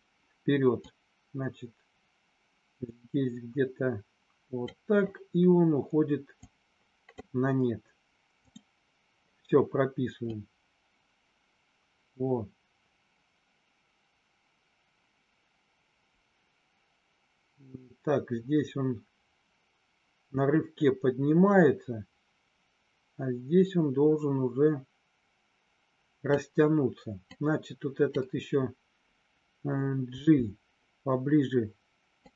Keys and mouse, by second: 0.9-4.6 drag, 6.5 click, 8.4 click, 10.3-26.3 drag, 27.3 click, 30.0 g, 32.1 click.